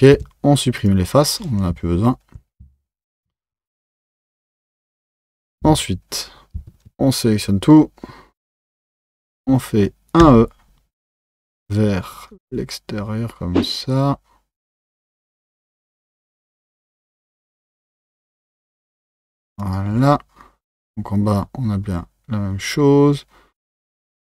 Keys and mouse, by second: 5.6 Tab, 6.6 Tab, 6.9 a.